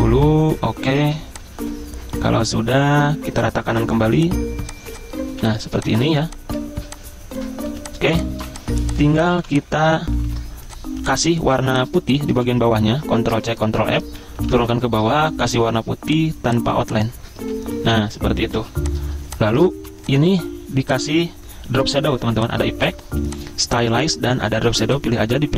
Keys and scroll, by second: 0.9 ctrl+g, 5.3 z, 6.1 v, 7.6-9.4 typing, 10.2 ctrl+shift+g, 10.3 ctrl+shift+g, 11.2-12.4 typing, 13.3 ctrl+c, 13.6 ctrl+f, 14.4 Down, 14.6 Down, 15.0 d, 17.5 ctrl+[, 18.6 z, 19.8 v.